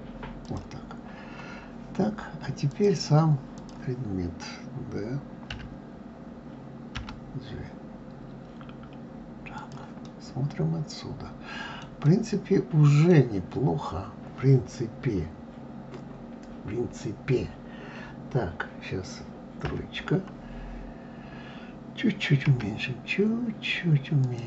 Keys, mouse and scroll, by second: 2.5-5.3 drag, 5.3 d, 6.7 g, 9.8-14.8 middle drag, 19.4 KP_3, 22.2 s.